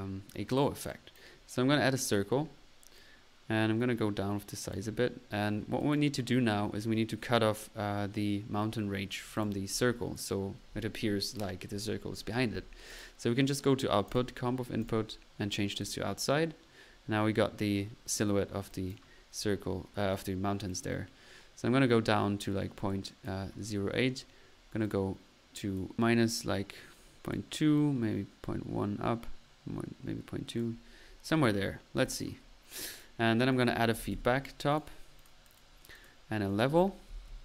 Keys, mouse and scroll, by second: 0.7 click, 1.2-1.5 drag, 1.8 middle click, 2.9 click, 5.0 click, 5.1 middle click, 5.8 click, 9.3-10.0 drag, 12.9 click, 14.0 click, 14.8-15.4 drag, 15.8 click, 16.4-16.9 middle drag, 18.7 click, 19.2 drag, 20.1 drag, 20.7-23.4 drag, 24.1-24.5 middle drag, 24.8 click, 26.0-27.5 drag, 26.9-27.7 typing, 27.7-30.8 drag, 32.0-32.4 drag, 33.6-34.4 typing, 36.5 click, 36.5 right click, 36.7 right click, 36.9-37.4 typing.